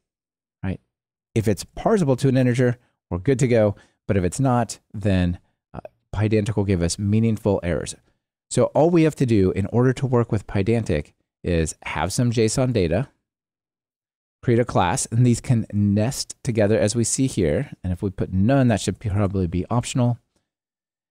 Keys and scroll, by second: 1.9 ctrl+r.